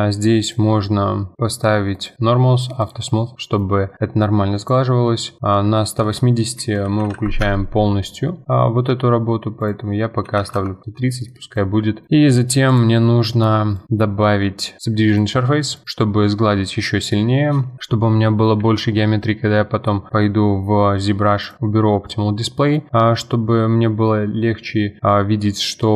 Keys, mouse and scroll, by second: 0.4 click, 1.9-2.9 drag, 3.3-4.6 middle drag, 4.6-7.4 drag, 9.6-11.3 drag, 11.3-12.1 middle drag, 12.1-12.7 scroll down 2, 12.7 click, 13.7-15.8 drag, 15.8-17.8 middle drag, 18.1-18.6 middle drag, 18.6 F4, 18.9-19.5 scroll up 2, 19.5-20.3 scroll up 1, 20.3-21.0 scroll up 1, 21.4 click, 22.1-22.8 middle drag, 22.8 scroll down 2, 23.0-25.9 middle drag.